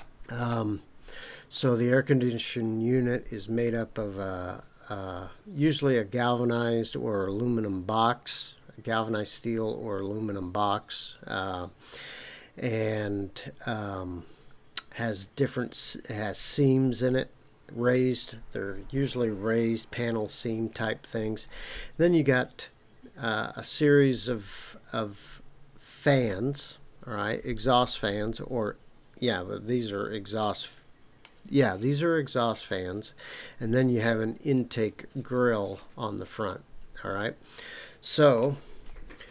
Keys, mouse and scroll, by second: 0.5-1.6 middle drag, 36.5-38.4 middle drag, 38.9 scroll down 2.